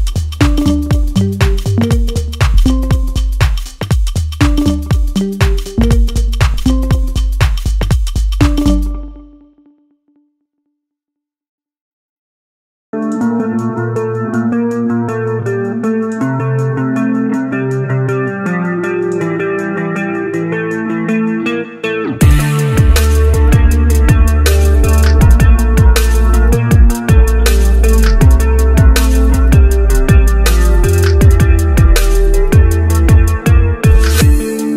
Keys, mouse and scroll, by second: 1.9 g, 3.8 click, 6.7 scroll down 1, 6.9-9.4 middle drag, 9.9 alt+shift+click, 10.8 click, 11.5 g, 13.9 Tab, 14.4 click, 14.7 scroll up 1, 15.0-15.5 scroll down 2, 15.5-16.2 scroll up 2, 16.2 g, 17.7 click, 18.0-18.7 scroll up 1, 18.7 g, 21.6 click, 22.0-23.6 middle drag, 25.2 click, 25.8 click, 26.5 click, 27.5 Tab, 28.0 click, 28.8 s, 30.2 Tab, 30.9 click, 31.2-32.7 middle drag, 32.8 click, 33.4 Tab, 33.9 s.